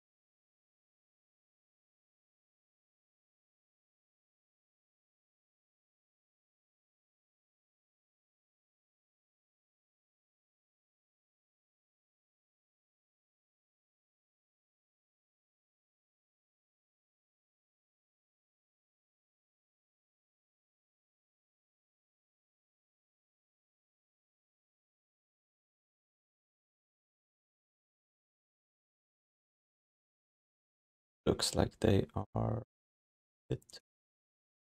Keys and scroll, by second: 1.4 alt+shift+d, 1.7 ctrl+s, 26.6 q, 29.4 ctrl+s.